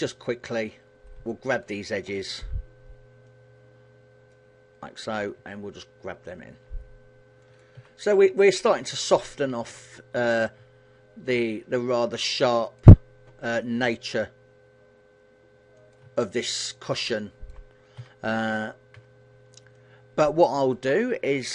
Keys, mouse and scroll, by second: 0.5 scroll up 3, 0.9 shift+middle click, 2.1 b, 5.0 g, 7.2 click, 7.4 a, 8.0 shift+middle click, 10.1 b, 13.3 g, 15.5 click, 15.8 shift+middle click, 17.7 a, 18.6 b, 21.3 g.